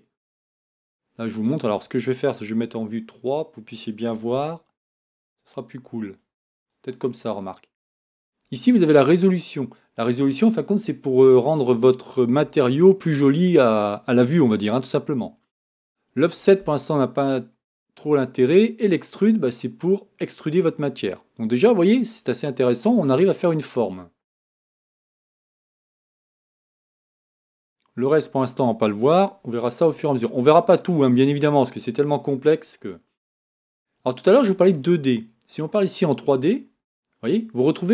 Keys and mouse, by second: 2.6 KP_3.